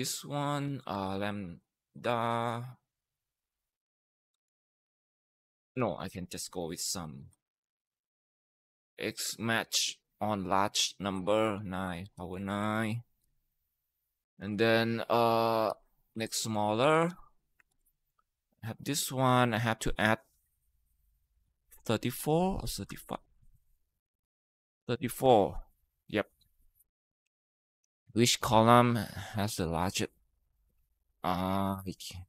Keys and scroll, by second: 0.0-1.8 typing, 4.0-8.8 typing, 11.0-12.6 typing, 13.0 Down, 13.1 Down, 14.1 ,, 15.3-16.6 typing, 17.5 ctrl+Return, 22.4-23.2 typing, 24.5-26.1 typing.